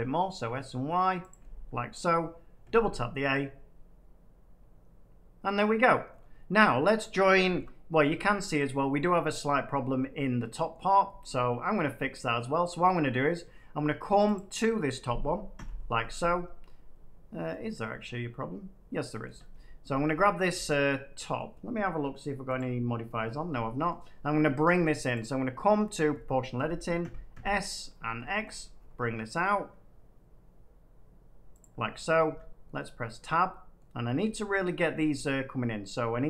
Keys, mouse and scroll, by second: 1.2 click, 2.6 a, 2.7 a, 3.0-3.3 scroll, 5.8 middle click, 6.0-6.6 scroll up 4, 6.9 middle click, 7.3 middle click, 7.5 shift+middle click, 7.6 shift+middle click, 8.6 middle click, 9.3 middle click, 9.7 middle click, 10.6 middle click, 11.2 shift+middle click, 11.2 shift+middle click, 11.4 middle click, 12.1 middle click, 12.5 Tab, 14.3 click, 15.5 l, 17.4 middle click, 17.5 Tab, 19.2 Tab, 19.2 middle click, 21.3 middle click, 22.5 click, 23.4 middle click, 23.8 middle click, 24.2 scroll, 25.1 click, 26.9 s, 27.2 x, 27.8-29.2 scroll, 31.5 click, 32.2 Tab, 33.1 middle click, 34.5 middle click, 34.8 Tab.